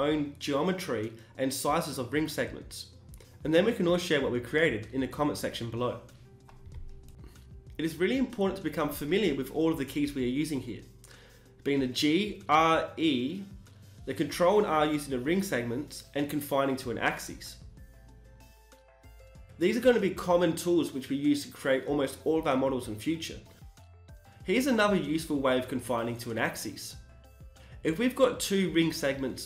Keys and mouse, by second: 0.9 e, 1.2 g, 3.5 click, 3.7 g, 5.3 e, 5.6 s, 7.3 e, 7.5 g, 9.9 g, 12.5 e, 12.8 s, 14.9 e, 15.2 g, 18.2 e, 18.5 s, 20.1 e, 20.6 g, 22.8 e, 23.3 g, 24.8 s, 26.8 e, 27.0 g, 29.0 b.